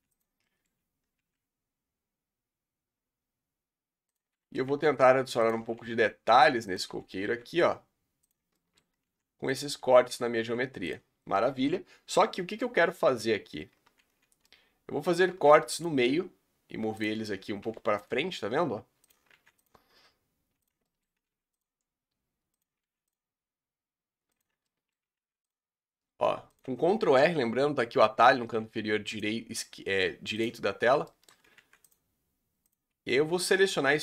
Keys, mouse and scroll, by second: 0.5 middle click, 0.7-1.0 scroll up 2, 1.1 ctrl+r, 4.6 g, 5.7 ctrl+r, 7.2 g, 8.5 shift+middle click, 9.0 ctrl+r, 10.4 g, 11.1 scroll down 2, 11.3-13.2 middle drag, 13.2 scroll up 2, 14.4 middle click, 15.3 ctrl+r, 17.1 scroll up 2, 17.7 ctrl+r, 19.3 ctrl+r, 20.8 shift+middle click, 21.3 ctrl+r, 22.8 ctrl+r, 24.7 shift+middle click, 25.1 ctrl+r, 28.4 ctrl+r, 30.7 scroll down 1, 31.1 shift+middle click, 31.6 ctrl+r, 33.6 s.